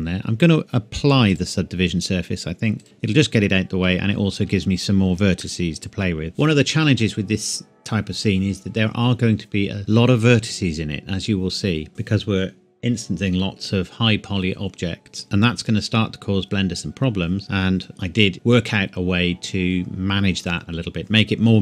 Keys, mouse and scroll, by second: 1.3 click, 4.1 scroll up 1, 4.3 Tab, 5.4 middle click, 6.3 Tab.